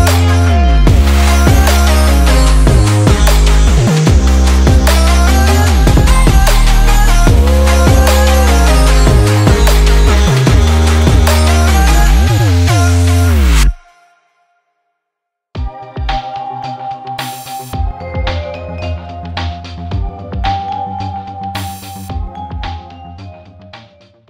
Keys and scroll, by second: 1.2 super+z, 1.6 super+z, 2.0 super+z, 2.2 super+z, 2.5 super+s, 3.5 super+z, 3.8 super+z, 4.0 super+z, 5.3 super+z, 5.8 super+s, 6.0 super+z, 6.6 super+z, 7.8 super+z, 8.4 super+z, 9.1 super+z, 9.2 super+s, 10.3 super+z, 11.2 super+s, 12.3 super+s, 13.0 super+s, 15.5 super+s, 16.3 super+z, 16.6 super+z, 16.7 super+z, 17.5 super+z, 18.3 super+z, 18.4 super+z, 18.7 super+s, 19.3 super+z.